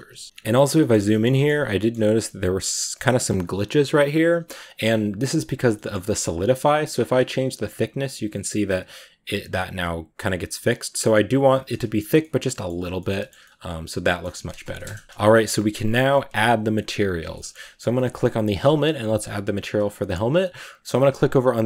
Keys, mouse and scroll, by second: 0.0 a, 0.2-0.9 scroll up 8, 0.9-1.4 shift+middle drag, 1.4 scroll up 3, 1.6-5.8 middle drag, 5.8 scroll down 1, 5.9-7.1 middle drag, 7.1-9.8 shift+drag, 11.6 middle drag, 11.9 a, 12.0-12.5 middle drag, 12.5 a, 12.6 scroll down 2, 12.8-14.7 shift+middle drag, 14.7 KP_0, 15.0 scroll down 2, 16.7-17.1 scroll up 2, 17.2 shift+middle click, 17.4-17.7 scroll up 2, 17.9-21.6 right drag.